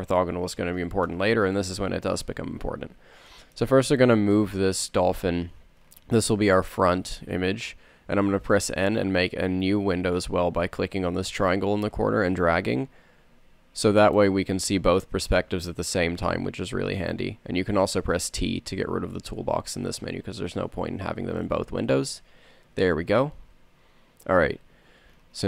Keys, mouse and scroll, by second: 7.4 n, 13.9 r, 15.5 n, 16.0 n, 22.2 t, 24.2 middle click.